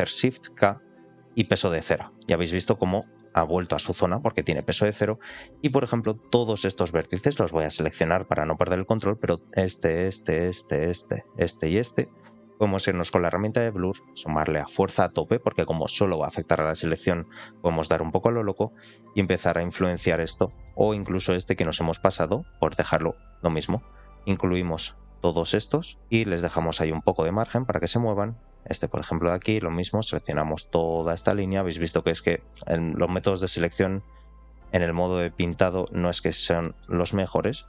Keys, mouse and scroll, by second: 0.7 shift+k, 1.3-2.4 middle drag, 2.6 scroll down 1, 2.9 shift+middle click, 3.2 middle click, 3.9 scroll up 1, 4.2 shift+middle click, 4.6 middle click, 5.1 scroll up 1, 5.3 middle click, 6.7 ctrl+click, 7.0 middle click, 8.1 ctrl+click, 9.1 ctrl+shift+click, 10.3 ctrl+shift+click, 10.9 ctrl+shift+click, 11.4 ctrl+shift+click, 11.6 middle click, 13.2 click, 14.4 click, 16.0 middle click, 16.4 shift+middle click, 16.7 scroll down 1, 17.1 click, 18.2 middle click, 18.7 click, 19.3 middle click, 19.7 click, 20.4 middle click, 21.0 ctrl+click, 21.2 middle click, 22.4 ctrl+shift+click, 22.7-23.8 drag, 24.7 ctrl+shift+click, 25.8 ctrl+shift+click, 26.0 ctrl+shift+click, 26.3-27.3 middle drag, 28.2 ctrl+click, 29.7 ctrl+shift+click, 30.0 ctrl+shift+click, 30.4 ctrl+shift+click, 31.0 ctrl+shift+click, 31.4 ctrl+shift+click, 31.9 ctrl+shift+click, 32.2 click, 33.0 middle click, 33.5 click, 34.5 middle click, 35.1 click, 35.6 middle click, 36.2-36.5 scroll down 1, 36.5 middle click, 37.5 click.